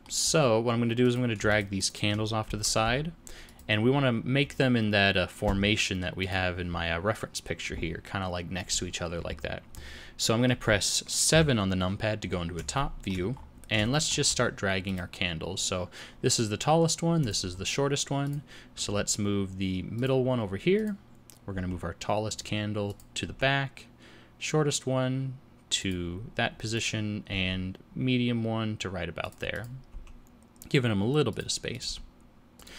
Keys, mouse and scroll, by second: 0.0 scroll up 1, 0.3 scroll down 2, 1.0 click, 1.5 shift+click, 2.1 click, 2.5 g, 3.9-4.5 scroll up 5, 10.2 middle click, 11.3 KP_7, 12.8 shift+middle click, 13.3 scroll up 2, 13.9 shift+middle click, 14.8 click, 17.2 click, 18.2 click, 18.8 g, 20.8 click, 21.5 g, 22.9 click, 23.2 g, 26.7 click, 27.3 g, 29.5 click, 29.9 g, 31.7 click, 31.9 g.